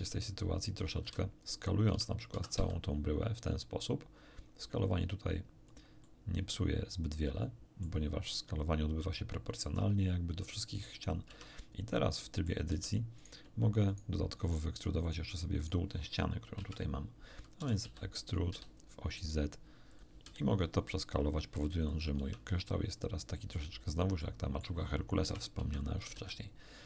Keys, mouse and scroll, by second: 1.0 a, 1.9 Tab, 2.3 s, 2.5 z, 5.6 click, 6.0-8.0 middle drag, 8.2-11.0 middle drag, 11.2 Tab, 12.1 middle click, 12.6 a, 13.1 right click, 13.8 shift+right click, 14.4 shift+right click, 15.0 shift+right click, 15.6 shift+right click, 16.5 KP_1, 17.6 e, 17.8 z, 18.4 z, 19.8 click, 20.2 s, 21.8 click, 22.1 Tab, 22.6-23.7 middle drag, 24.2-24.8 middle drag, 25.2 KP_1, 25.5 Tab, 26.0 a, 26.1 a.